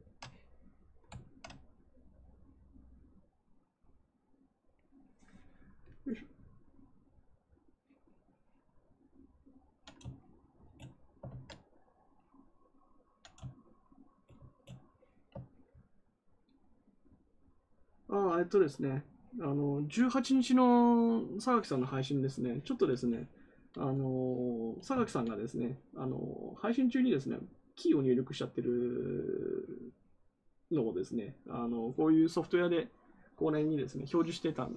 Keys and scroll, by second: 11.2 ctrl+z, 24.9 ctrl+z.